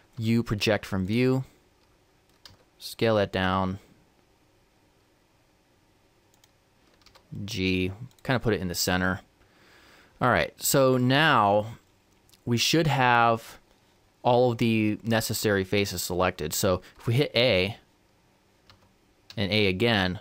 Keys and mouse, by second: 0.2 u, 2.5 s, 7.1 g, 10.4-12.3 middle drag, 18.7 a, 19.3 a.